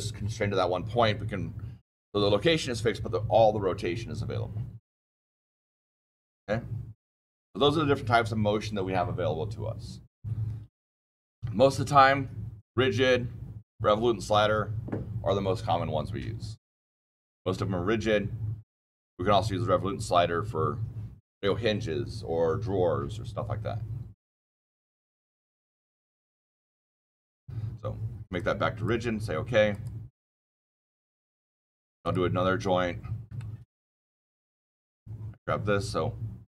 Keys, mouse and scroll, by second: 11.7 click, 26.2 click, 28.3 click, 29.6 click, 31.9 click, 32.9-33.2 scroll up 1, 33.3-34.3 shift+middle click, 33.7-34.3 scroll, 34.6-36.4 scroll down 14.